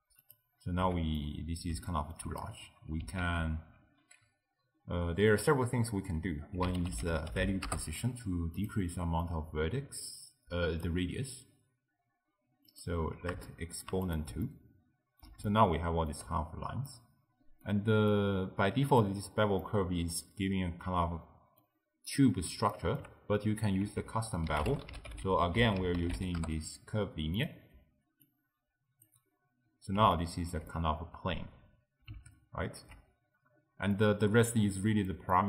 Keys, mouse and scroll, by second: 0.3 click, 0.9 x, 1.2-3.3 middle drag, 3.3 ctrl+a, 9.3 click, 12.7 click, 13.5-14.1 shift+middle drag, 14.1 click, 14.5-18.2 ctrl+middle drag, 18.2 click, 19.7-23.9 middle drag, 23.9 ctrl+a, 28.3 drag, 30.2-33.6 ctrl+middle drag, 33.6-34.0 scroll down 1, 34.0-35.4 middle drag.